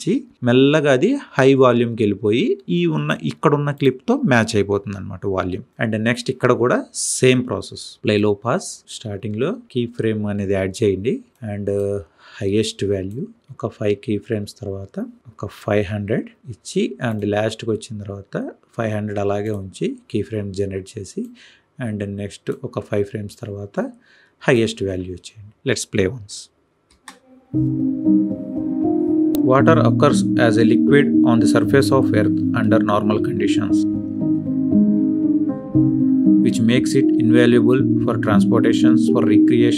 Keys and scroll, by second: 13.4 Right, 26.8 space.